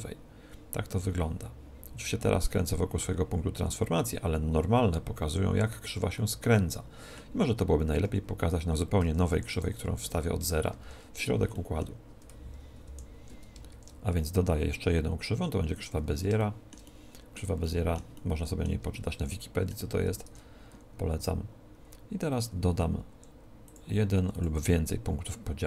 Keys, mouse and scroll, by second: 6.1-9.8 middle drag, 8.0 a, 9.0 Tab, 9.5 x, 9.9 shift+a, 10.7 shift+c, 11.5-13.3 middle drag, 12.8 ctrl+., 13.7 shift+a, 16.3-20.6 middle drag, 20.3 Tab, 21.1-23.1 middle drag, 23.1 w, 24.1 w.